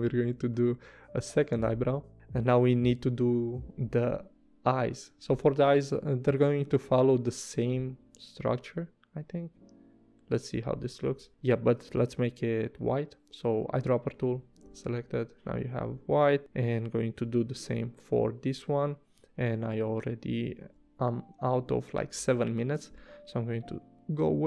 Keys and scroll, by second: 2.1 v, 3.0 p, 10.6 v, 12.1 i, 14.1 v, 17.1 p, 20.6 super+z.